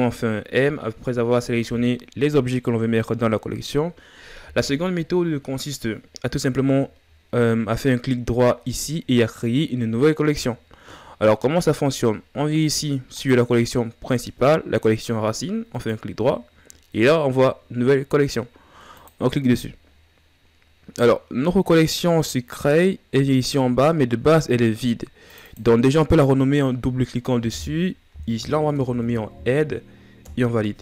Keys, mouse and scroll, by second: 8.4-8.7 scroll down 2, 8.8-10.3 scroll up 2, 10.6-11.2 scroll up 4, 11.4-11.8 scroll up 4, 12.8 click, 15.5-21.5 right drag, 21.5 scroll down 5, 25.0-30.0 drag.